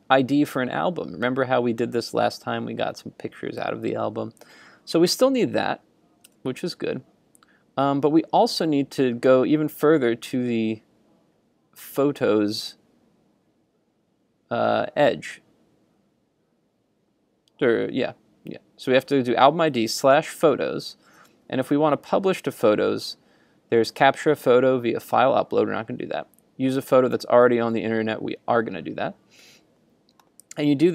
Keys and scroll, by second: 6.3 super+Tab.